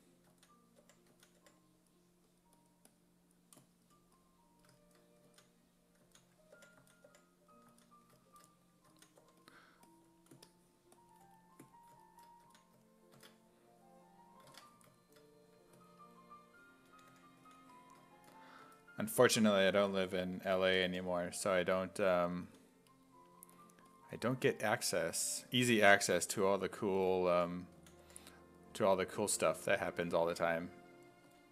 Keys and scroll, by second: 0.3-1.9 typing, 5.3-7.7 typing, 8.9 s, 9.2 3, 12.5 s, 13.2 alt+Tab, 14.6 Tab, 16.7-21.4 typing, 22.5 s, 25.6 1, 26.8-28.5 typing, 30.0 s, 31.1-31.5 typing.